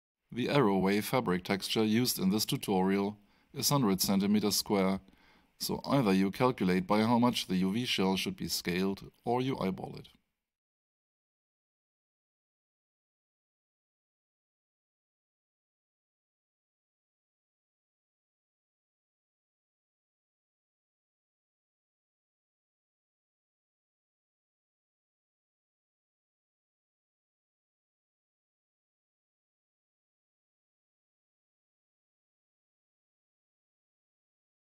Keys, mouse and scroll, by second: 1.1 click, 24.6 click, 26.9 F8, 27.8 click, 28.6 scroll down 1, 29.8 alt+click, 34.5 alt+middle click.